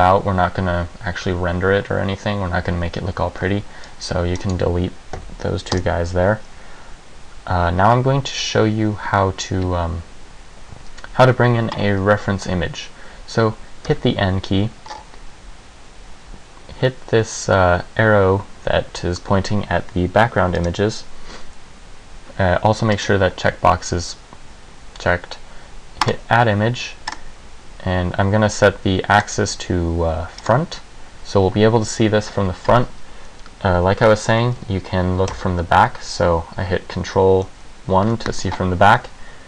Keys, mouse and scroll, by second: 3.4 c, 4.6 right click, 5.3 Delete, 14.1 n, 15.1-15.9 scroll up 4, 15.9 scroll up 1, 20.7 click, 23.1 click, 26.1 click, 27.3 click, 29.3 click, 35.4 ctrl+KP_1.